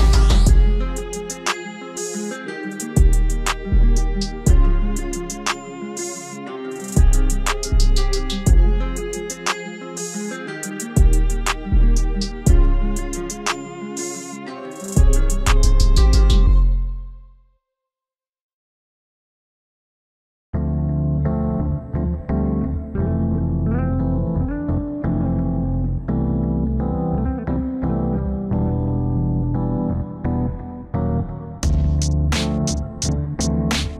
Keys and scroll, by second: 8.9 F4, 10.6 alt+w, 18.6 alt+w, 23.5 F4, 27.8 ctrl+a.